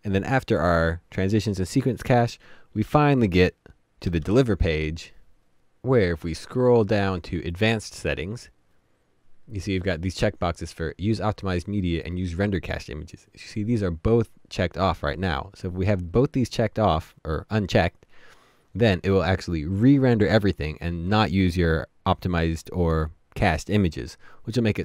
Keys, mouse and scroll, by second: 5.4 *, 5.5-6.1 scroll up 1, 6.1-10.4 scroll down 1.